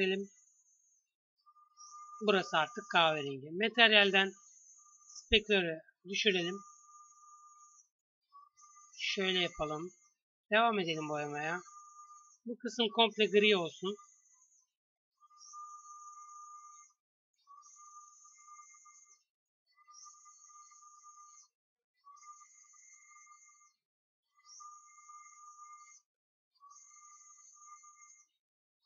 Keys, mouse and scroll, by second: 0.1 s, 1.4 Tab, 7.0 Tab, 8.0 a, 8.3 c, 15.3 s, 16.0 g, 17.8-21.3 typing, 22.7 a, 24.0 a, 24.8 a, 26.6 ctrl+z, 27.0 ctrl+z.